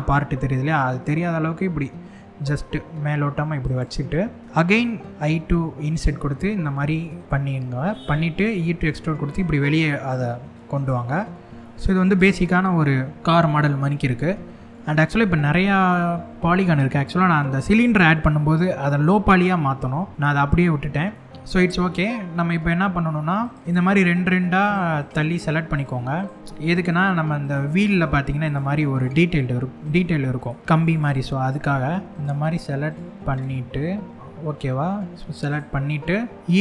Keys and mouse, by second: 3.3 click, 4.2 middle click, 4.5 middle click, 5.1 i, 7.2 middle click, 11.2 middle click, 12.2 middle click, 13.9 middle click, 20.1 shift+middle click, 20.7-21.8 middle drag, 23.1 click, 24.6 shift+click, 25.7 shift+click, 26.5 shift+click, 27.0 shift+click, 28.1 shift+click, 30.0 shift+click, 30.6 shift+click, 31.1 shift+click, 31.9 shift+click, 32.9 shift+click, 35.1 shift+click, 35.8 middle click.